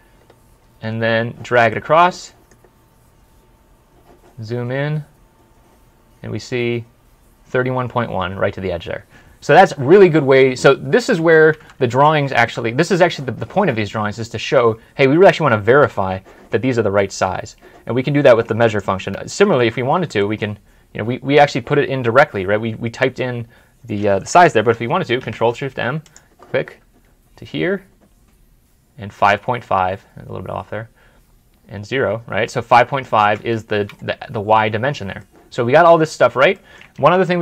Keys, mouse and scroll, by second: 0.1 scroll down 1, 1.6 middle click, 2.8-3.4 scroll down 1, 3.4 scroll up 1, 4.5-5.0 scroll down 1, 5.0 scroll up 1, 11.2 Escape, 11.7 Escape, 11.8 alt+Tab, 14.7 scroll up 1, 15.2 scroll down 1, 17.0 scroll up 1, 19.2 scroll up 1, 19.5 scroll down 1, 20.1 middle click, 20.4 scroll down 1, 20.8 scroll up 1, 21.3 scroll up 1, 21.5 middle click, 25.1 ctrl+shift+m, 33.6 Escape, 34.0 scroll up 1, 34.4 scroll down 1, 35.1 middle click, 36.9 alt+Tab.